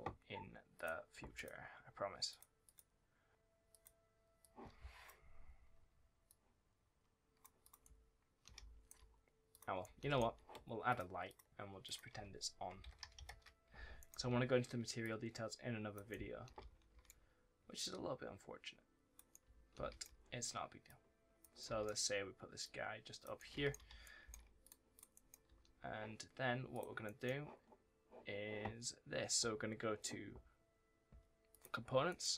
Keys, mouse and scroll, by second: 0.1-0.6 scroll down 1, 0.6 click, 1.7-2.1 scroll up 1, 2.1 click, 7.7 right click, 9.4 click, 9.7 right click, 10.0 s, 10.7 click, 12.6 KP_0, 12.9 KP_2, 13.1 KP_Enter, 13.8 right click, 14.0 w, 14.9 click, 16.0 right click, 17.7 click, 19.2 right click, 19.3 w, 19.6 d, 20.7 click, 21.4 right click, 21.5 s, 22.5 click, 23.2 right click, 23.4 s, 23.9 right click, 24.1 s, 24.5 click, 25.0 right click, 25.3 w, 26.6 click, 26.9 right click, 31.4 click, 31.9 right click, 32.2 w.